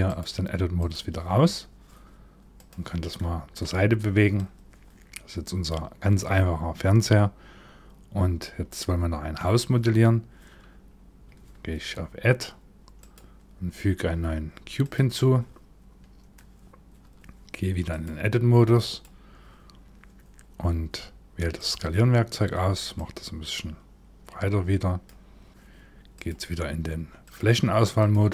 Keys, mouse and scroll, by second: 2.2 click, 2.7 middle click, 2.7-4.0 scroll down 1, 4.0 click, 12.6 click, 17.5 click, 21.2 click, 22.6 click, 25.5 click, 25.7 click, 26.9 click.